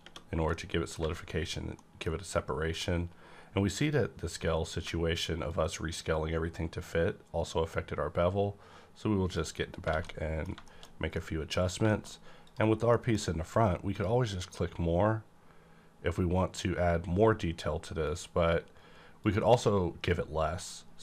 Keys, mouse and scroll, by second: 0.0 t, 0.5 middle click, 1.0 alt+a, 1.7 middle click, 3.8 click, 5.5-9.6 shift+drag, 9.8 scroll down 2, 9.9 alt+a, 10.1-10.9 alt+middle drag, 10.9 scroll down 2, 11.1-11.7 middle drag, 11.7-12.9 scroll up 3, 12.4 click, 12.5 click, 12.9 middle click, 12.9 middle click, 13.8 click, 18.1 click, 19.2 click.